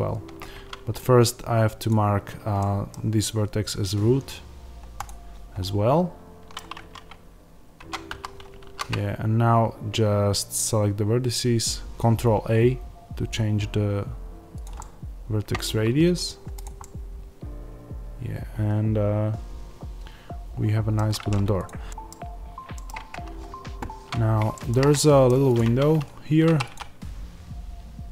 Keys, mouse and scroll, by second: 0.4 Tab, 2.5-4.9 middle drag, 4.9 click, 5.5-14.5 middle drag, 6.6 Tab, 8.0 a, 8.5 ctrl+a, 14.5 click, 14.7-16.5 middle drag, 15.7 Tab, 16.1 scroll down 1, 16.5 click, 16.7-21.5 middle drag, 21.5 click, 21.8-25.4 middle drag, 22.1 scroll down 1, 22.8-24.2 scroll down 1, 24.8 scroll up 2, 25.4 click, 25.6 Tab, 26.4 3, 26.5-28.1 drag.